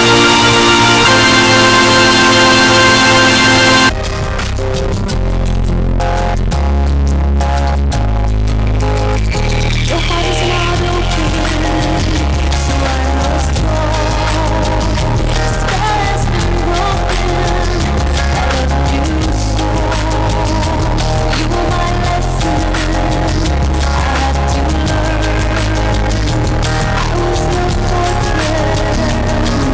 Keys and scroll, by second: 4.5 Page_Down.